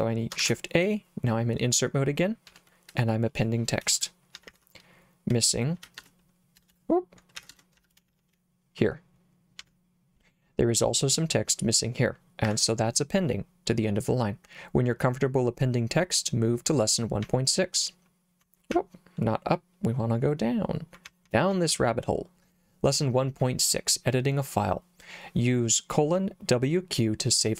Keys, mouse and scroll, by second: 0.4 shift+a, 2.5 o, 4.0-9.6 typing, 12.5 Escape, 17.3 k, 18.7 j, 21.1 j, 21.3 j, 21.6 j, 21.8 j.